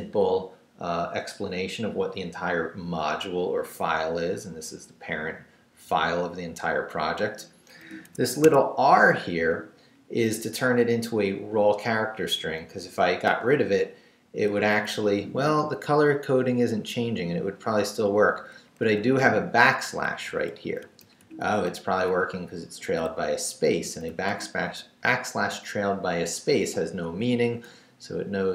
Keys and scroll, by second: 7.6 Up, 8.0 Escape, 13.3 x, 14.2 Down, 18.8 shift+a, 20.1 shift+Left, 20.8 Right, 21.7 Down, 22.1 Up, 23.1 Left, 23.8 Right, 27.4 Down.